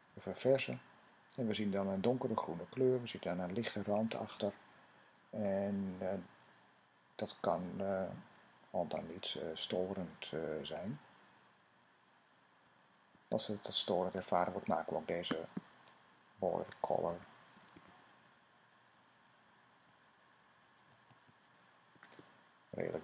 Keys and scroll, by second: 0.2 super+r, 16.6-18.0 typing, 19.7 Down, 20.0-21.1 typing.